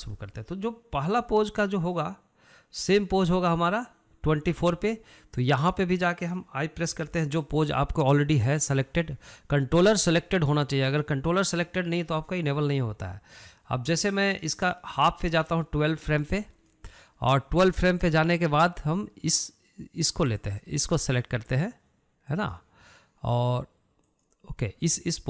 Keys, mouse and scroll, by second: 0.7-2.0 shift+middle drag, 2.0-17.1 drag, 21.1 click, 23.1 click, 24.8 click.